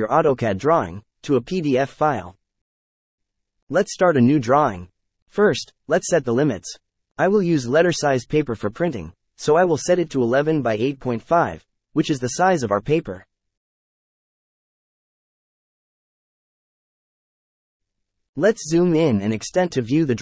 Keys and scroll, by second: 0.0-1.0 typing, 1.9 Return, 5.2 shift+3, 5.6 KP_0, 6.6 ,, 6.8 KP_0, 9.3 Return, 10.4 shift+#, 12.0-14.1 typing, 14.6 Return, 16.9 z, 17.7 Return, 18.9 e, 19.7 Return.